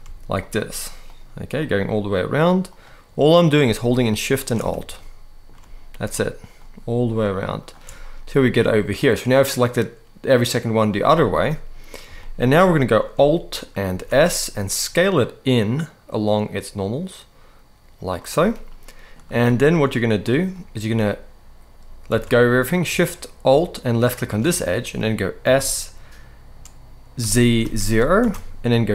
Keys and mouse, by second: 0.2 alt+shift+click, 1.3 alt+shift+click, 1.9 alt+shift+click, 3.4 alt+shift+click, 4.7 shift+middle click, 5.8 alt+shift+click, 6.4 alt+shift+click, 7.4 alt+shift+click, 8.7-10.5 middle drag, 11.1 middle click, 11.9 shift+middle click, 13.6 alt+s, 17.9 click, 18.4 middle click, 19.2 shift+middle click, 20.0 middle click, 21.8 alt+a, 25.2 s, 26.9 z, 27.3 0, 27.9 Return, 28.7 g.